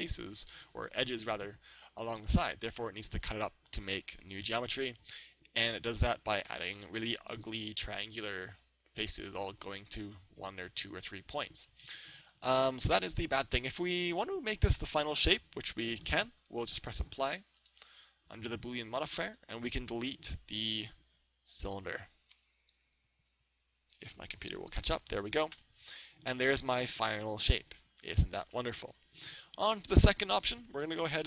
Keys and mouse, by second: 6.5-8.3 middle drag, 9.5-14.1 middle drag, 15.0 right click, 17.7-23.8 drag, 23.8 right click, 24.9 Delete, 26.5-28.3 middle drag, 28.4 middle click, 28.6-30.5 middle drag, 29.9 right click.